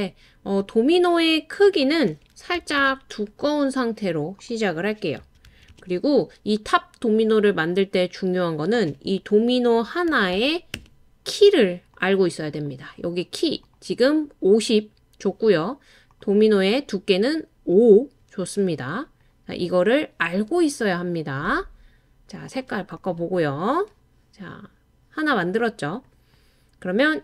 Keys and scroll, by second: 2.6 5, 2.8 Return, 5.2-5.7 typing, 9.9-10.8 typing, 18.5 typing, 25.8 typing.